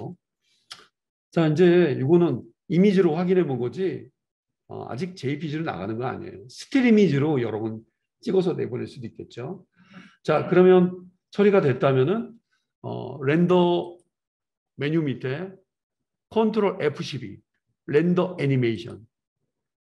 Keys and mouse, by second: 0.0-10.0 drag, 18.2-20.0 drag.